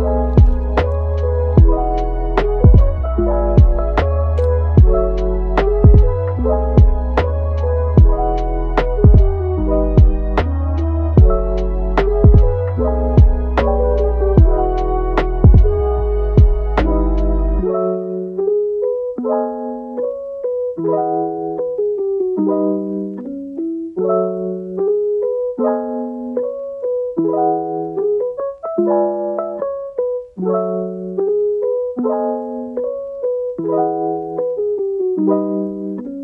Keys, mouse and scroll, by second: 1.8 click, 2.0 g, 3.3 click, 3.6 g, 4.6 click, 4.8 g, 5.5-6.6 middle drag, 6.6 alt+s, 7.7 click, 8.2 alt+s, 9.5 click, 10.0 alt+s, 10.8-11.2 scroll up 1, 11.2 middle click, 11.7 click, 12.1 g, 13.2-15.2 middle drag, 15.2 click, 15.9-17.0 middle drag, 17.0 g, 18.4-19.1 middle drag, 19.1 Tab, 19.5 scroll down 1, 19.7 middle click, 19.9-20.5 scroll up 2, 20.0 Tab, 20.5-21.0 middle drag, 21.0 click, 21.4 g, 23.1 click, 23.7 click, 24.1 g, 26.0-29.0 middle drag, 29.0 Tab, 29.6 Tab, 30.7 shift+d, 32.0 scroll down 2, 32.2-32.7 middle drag, 32.7 g, 34.5 middle click, 35.1 g, 35.9 Tab.